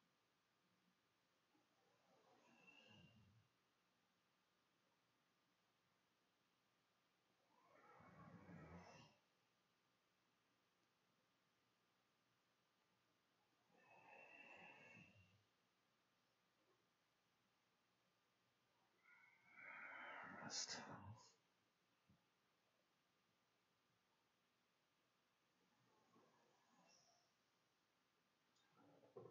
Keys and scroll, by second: 1.0 space, 1.9 Right, 2.9 End, 9.6-12.7 typing.